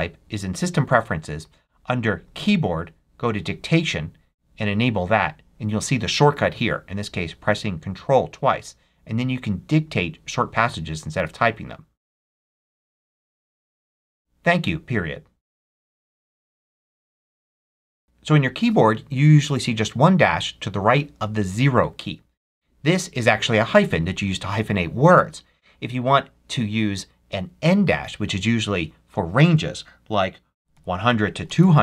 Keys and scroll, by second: 30.1-31.8 typing.